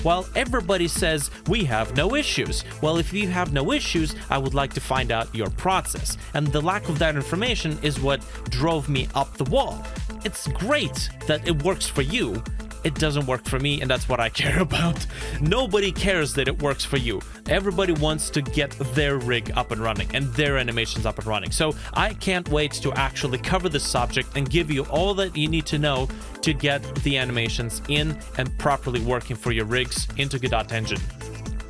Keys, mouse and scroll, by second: 4.9 space, 5.3 Delete, 5.3 scroll down 1, 10.9 right click, 11.7 Escape, 13.9 Escape, 15.5 right click, 17.6 Escape, 17.7 Delete, 23.8 shift+middle click, 26.1 middle click, 28.5 middle click, 28.6 ctrl+s.